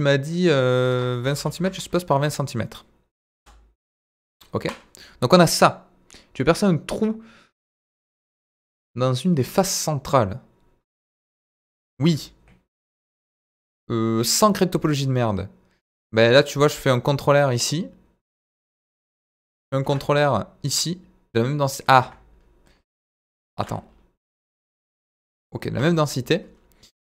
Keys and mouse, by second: 4.5 KP_Decimal, 9.3 Tab, 11.9 ctrl+r, 18.8 Escape, 19.8 ctrl+r, 23.5 ctrl+r, 25.7 Escape.